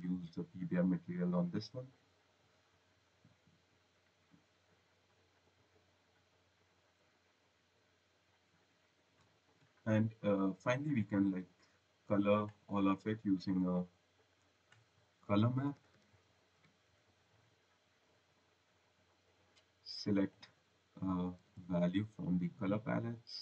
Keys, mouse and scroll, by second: 0.0-0.6 typing, 1.5 click, 3.0 click, 4.2-4.8 scroll, 5.2 click, 5.7 click, 8.9 click, 9.1 right click, 10.1 click, 10.8 click, 11.4 click, 12.6 click, 14.2 click, 15.0-17.5 typing, 17.9 click, 19.8 click, 21.1-22.5 typing, 23.2 click.